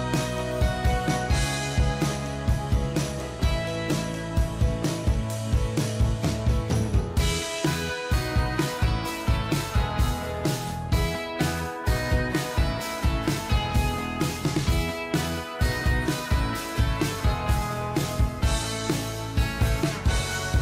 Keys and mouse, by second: 0.7 click, 4.4-5.7 typing, 6.7 Return, 7.1 f, 8.7 i, 9.0 d, 9.2 a, 9.3 y, 12.6 ctrl+click, 16.8 double click.